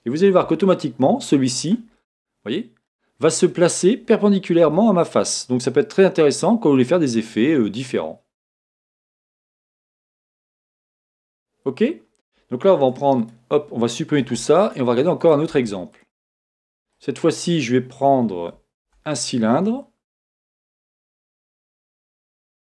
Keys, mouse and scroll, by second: 0.4 g, 2.0-9.7 middle drag, 4.6 g, 9.7 click, 10.0 scroll down 1, 10.1 middle click, 10.9 scroll up 1, 12.8 middle click, 13.2 click, 14.2 x, 15.2 click, 15.5 x, 16.4-16.9 scroll down 1, 17.0 middle click, 17.6 scroll up 1, 18.8 shift+a, 22.0 scroll down 1.